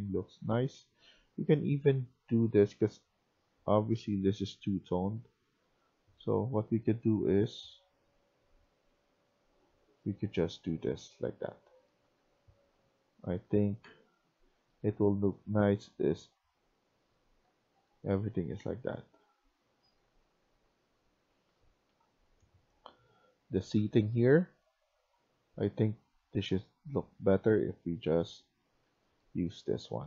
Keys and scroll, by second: 0.0-1.0 typing, 10.3-12.6 typing, 14.6 w, 17.4-21.9 typing, 28.3-29.2 typing.